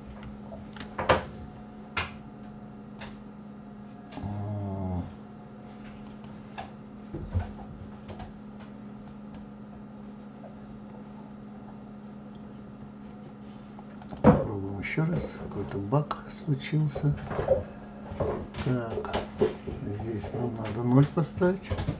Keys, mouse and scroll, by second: 0.2 ctrl+z, 3.1 click, 6.2 click, 9.2 click, 14.1 click, 19.7 click.